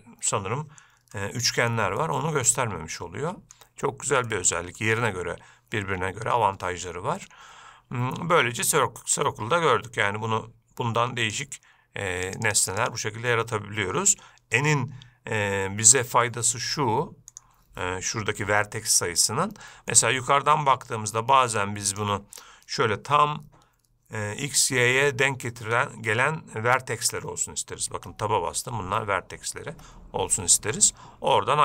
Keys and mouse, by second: 1.4-1.9 shift+middle drag, 2.3-3.8 middle drag, 4.5-5.0 shift+middle drag, 10.2-11.6 drag, 12.5 click, 12.7 click, 12.9 click, 13.0 click, 17.5 click, 19.4-20.2 shift+middle drag, 21.7 click, 28.1 Tab, 29.9 Tab.